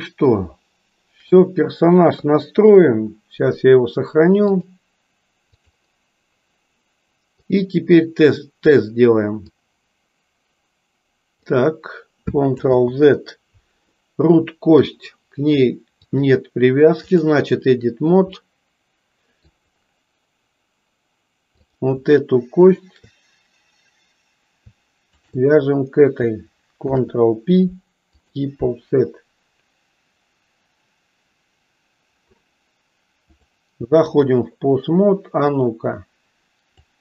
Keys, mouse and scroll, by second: 2.1 KP_3, 4.6-5.7 drag, 7.4 click, 9.7-11.5 drag, 12.6 ctrl+z, 13.9-14.9 middle drag, 16.0-17.3 drag, 18.5 middle click, 26.7 ctrl+p, 33.4-34.4 drag, 35.5 click.